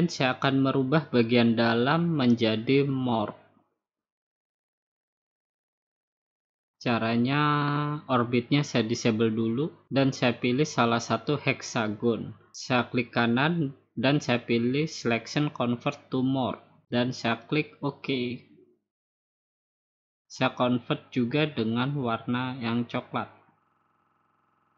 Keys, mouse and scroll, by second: 8.3 click, 10.9-12.0 drag, 12.1-13.2 drag, 14.1-15.2 right drag, 16.4-17.6 drag, 18.1-19.3 drag, 19.8 click, 20.6 right click, 23.3 click.